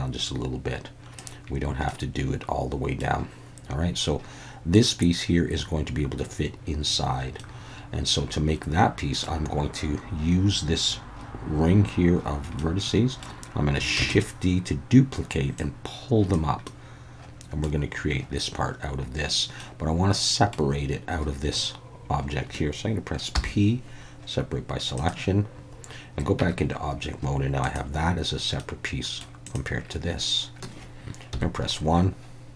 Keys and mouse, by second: 1.9-3.0 middle drag, 7.4-9.3 middle drag, 12.6 middle click, 14.0 shift+d, 14.1-16.3 drag, 16.7 middle click, 19.6 middle click, 23.3 p, 26.4 Tab, 28.6-29.2 middle drag, 29.4 click, 31.3 KP_1.